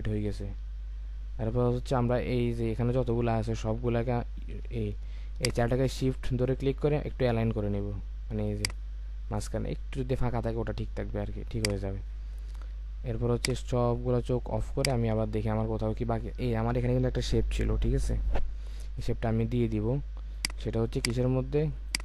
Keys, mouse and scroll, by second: 5.4 shift+click.